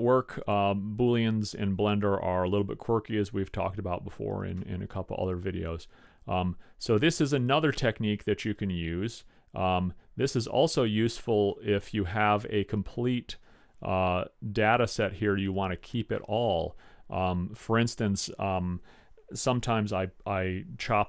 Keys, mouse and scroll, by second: 2.5 click, 4.2-6.6 middle drag.